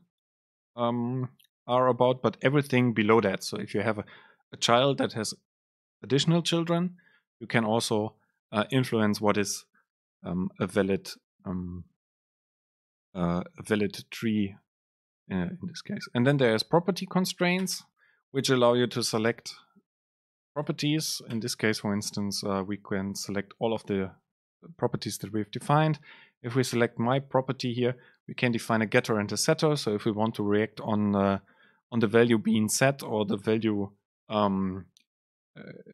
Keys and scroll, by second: 17.8 Return, 19.4 super+space, 25.9 super+space.